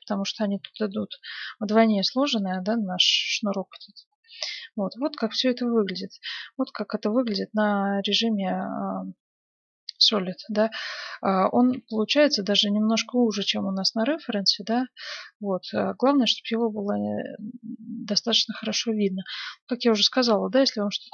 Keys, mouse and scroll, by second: 0.5 a, 0.6 b, 1.0 g, 2.1 a, 2.6 g, 3.9 middle click, 4.1 click, 4.2 Tab, 5.0 z, 7.8-10.2 middle drag, 10.7-13.6 middle drag, 14.7-20.2 middle drag, 20.6-21.1 middle drag.